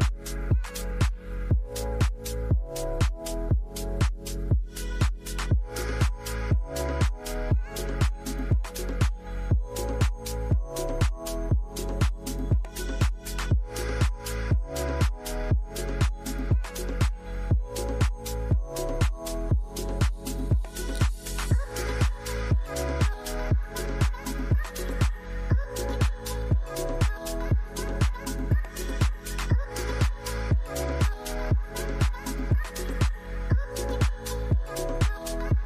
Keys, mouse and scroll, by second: 0.2 shift+click, 4.9 shift+click, 6.9-7.7 typing, 11.9 typing, 15.2 F11, 29.0 shift+\.